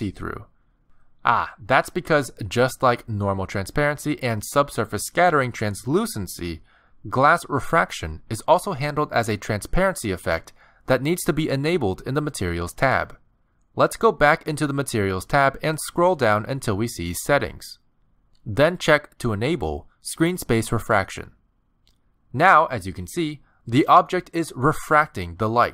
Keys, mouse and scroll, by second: 1.1 r, 2.6 middle click, 5.3 middle click, 6.1 shift+middle click, 6.5-6.9 scroll down 2, 6.9 middle click, 8.0 scroll up 1, 8.6 middle click, 13.5 click, 15.7-16.6 scroll down 10, 21.2 click, 22.4 middle click, 23.2 middle click, 24.5-24.9 scroll down 3, 25.0 shift+middle click, 25.5 g.